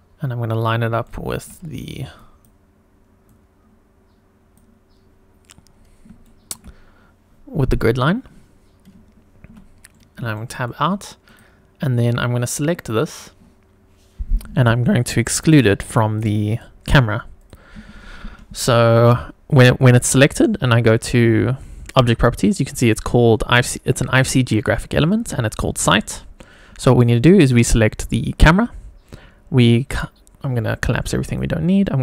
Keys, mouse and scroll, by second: 1.0 shift+middle click, 2.1 click, 3.4 click, 5.8 scroll up 1, 6.2 shift+middle click, 9.5 Tab, 10.2 scroll down 1, 10.3 shift+middle click, 11.4 click, 22.0 click, 27.4 click, 30.4-31.3 drag.